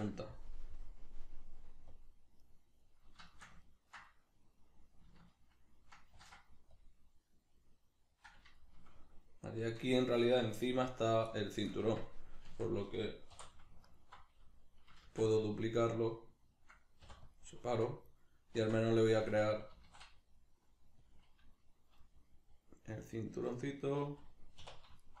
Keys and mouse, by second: 2.6 right click, 3.3-6.2 shift+middle drag, 6.2 ctrl+r, 8.2 click, 8.6-11.8 shift+middle drag, 11.8 Tab, 13.4 3, 13.8 alt+right click, 15.0 shift+d, 15.5 right click, 17.0 p, 18.1 right click, 18.6 Tab, 21.2 click, 22.0-25.0 middle drag, 24.6 2, 25.0 alt+right click.